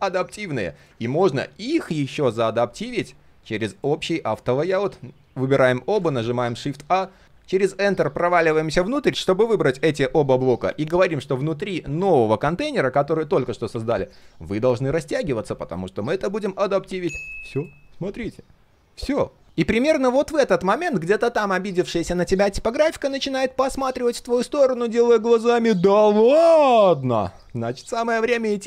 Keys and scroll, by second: 0.9 ctrl+z.